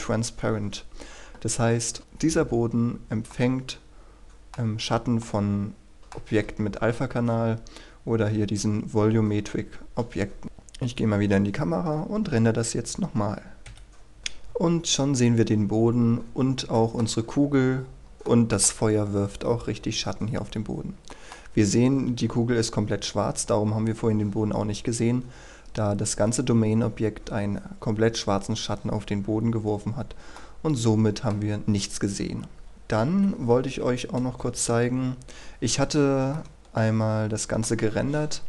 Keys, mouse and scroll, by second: 3.3-6.4 middle drag, 7.2-8.6 scroll up 1, 10.4 KP_0, 13.6 F12, 14.2 click, 16.5-16.9 scroll up 1, 16.9 middle click, 17.3 scroll up 1, 18.4 middle click, 20.6 scroll down 1, 21.2 middle click, 21.6-23.2 scroll up 1, 23.2 scroll down 1, 30.5 middle click, 33.2 Escape, 34.5 KP_1, 36.5 shift+middle click.